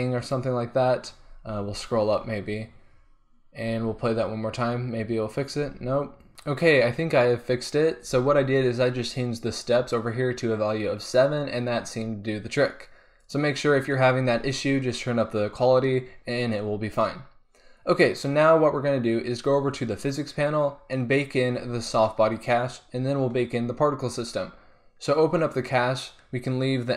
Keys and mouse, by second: 3.7 alt+a, 5.8 alt+a, 6.3 alt+a, 8.4 alt+a, 13.2-16.9 drag, 16.9-20.0 middle drag, 20.0-23.0 drag, 25.5-26.9 drag.